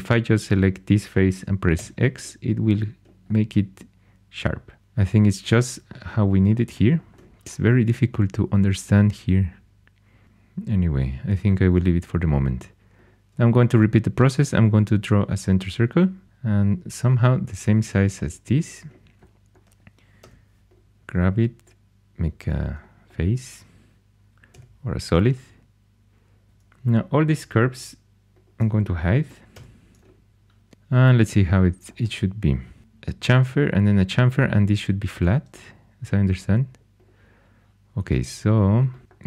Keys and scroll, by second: 1.7 x, 20.2 3, 24.5 g, 26.4 2, 29.5 h.